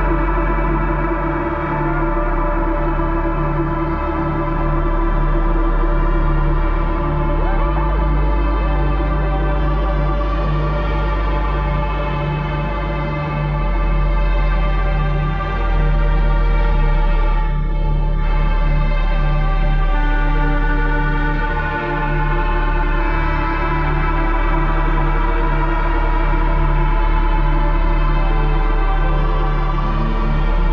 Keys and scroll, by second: 0.5 space, 1.4 space, 10.2 Down, 11.0 Return, 24.0 Up, 24.6 Up, 25.0 Up, 25.3 Down, 28.4 Up, 29.9 Down, 30.3 Down, 30.6 Return.